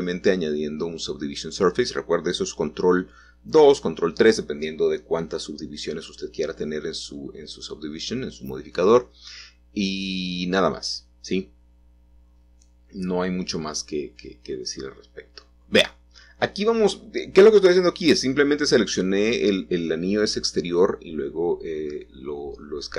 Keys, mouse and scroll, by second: 2.6-3.1 scroll down 2, 3.1 shift+middle click, 4.6 shift+middle click, 5.3-6.1 scroll up 1, 6.1-7.9 scroll down 1, 8.4 a, 8.6 a, 9.9 click, 13.9 g, 14.0 g, 18.4 click, 20.9 shift+click.